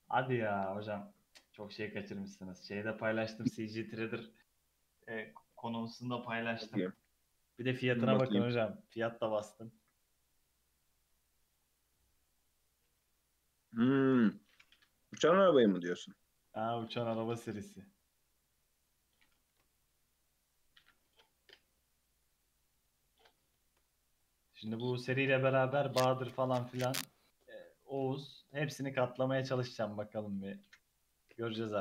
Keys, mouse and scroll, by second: 4.2 scroll down 1, 4.5 Tab, 5.0 alt+z, 5.5 alt+z, 5.9 Tab, 6.2 middle click, 6.8 ctrl+r, 9.6-10.1 middle drag, 10.1 Tab, 10.5-11.6 middle drag, 11.6-12.0 scroll up 1, 12.0 middle click, 12.9 s, 15.4 /, 15.9-17.1 scroll up 4, 16.3 Tab, 16.5-16.9 middle drag, 17.1 ctrl+r, 19.5 ctrl+r, 21.0 Tab, 21.3-22.7 middle drag, 22.7 Tab, 22.9 scroll up 1, 23.0-23.8 middle drag, 23.8 scroll up 2, 24.2-26.3 middle drag, 26.3 ctrl+r, 28.1 ctrl+r, 29.7 ctrl+r, 31.4 shift+middle click.